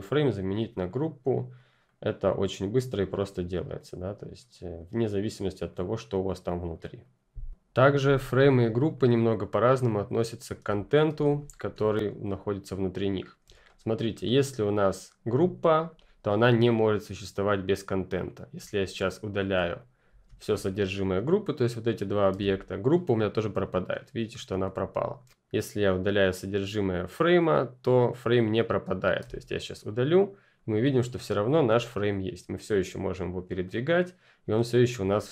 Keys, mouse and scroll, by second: 8.9 F10, 8.9 click, 10.6 Delete, 10.8 click, 11.0 Delete, 11.3-12.0 scroll down 1, 12.0 ctrl+scroll down 1, 12.1-13.1 ctrl+scroll up 1, 13.1 ctrl+scroll down 1, 13.5 click, 15.0 click, 18.5 click, 22.2 Delete, 24.5 ctrl+Delete, 24.7 ctrl+z, 29.1 Delete, 29.9 click, 34.9 ctrl+click.